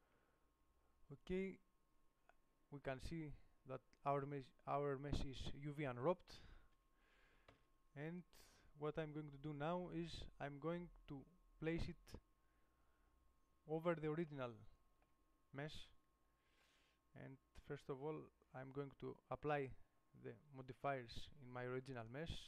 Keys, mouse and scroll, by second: 0.2 u, 7.9 Tab, 8.4-12.1 middle drag, 17.0-20.7 right drag, 20.7 click.